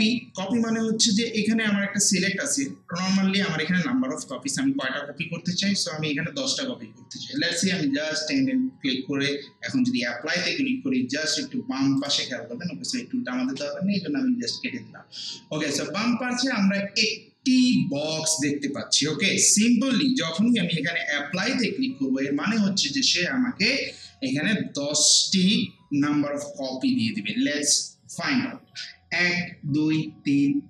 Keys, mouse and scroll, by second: 4.3-7.1 drag, 7.7-8.3 typing, 12.0 click, 21.3 click.